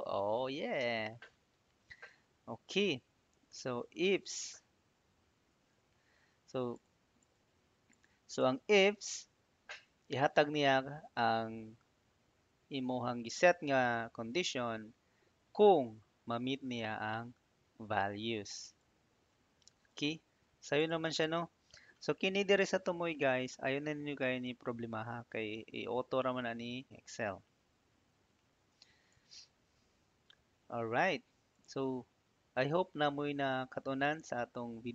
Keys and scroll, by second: 28.6 Tab.